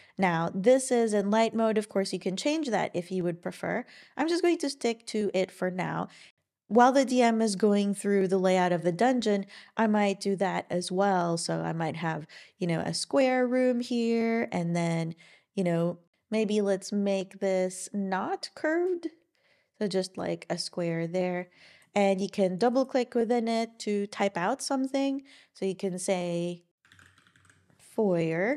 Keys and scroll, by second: 26.6-27.5 typing.